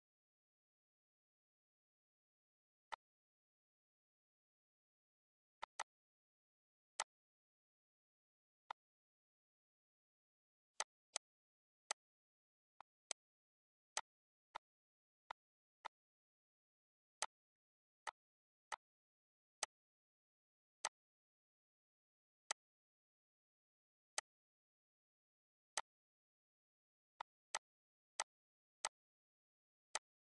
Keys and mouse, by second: 2.4 click, 5.4 click, 6.9 click, 8.5 click, 10.7 click, 11.7 click, 12.6 click, 13.6 click, 14.7 click, 15.2 shift+click, 16.6 click, 18.1 click, 18.9 click, 20.2 click, 21.9 click, 23.8 click, 25.3 click, 26.7 click, 27.5 click, 28.1 click, 29.0 click, 30.0 click.